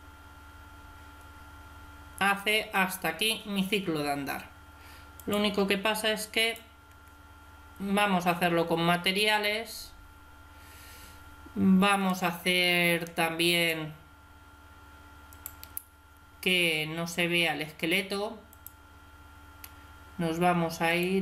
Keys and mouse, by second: 2.7 Escape, 5.1-7.7 drag, 8.7-11.9 middle drag, 11.9-15.0 right drag, 17.1-18.4 middle drag, 18.4-20.3 drag, 20.7-21.2 drag.